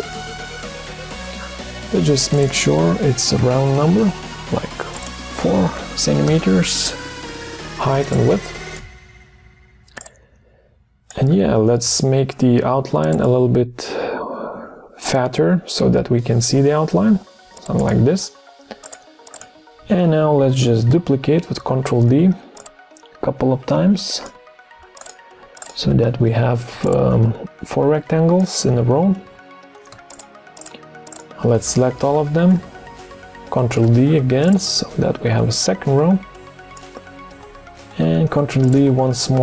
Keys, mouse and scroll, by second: 3.4 4, 3.7 Return, 5.7 4, 6.1 Return, 21.5 ctrl+d, 26.2 ctrl+d, 29.1 ctrl+d, 30.1 shift+click, 30.6 shift+click, 30.7 shift+double click, 31.1 shift+click, 33.6 ctrl+d, 37.5 ctrl+d.